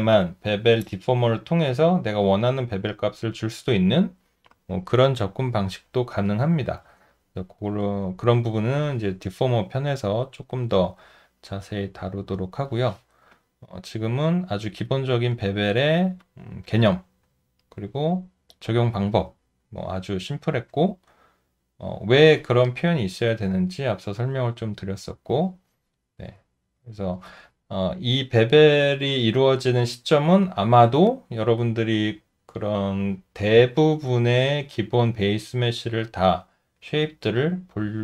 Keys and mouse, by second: 9.5 alt+click, 11.4 alt+middle click, 12.2 alt+right click, 13.3 alt+click, 14.2 alt+middle click, 14.9 alt+right click, 15.6 alt+middle click, 16.2 alt+click, 17.4 alt+middle click, 21.1 alt+middle click.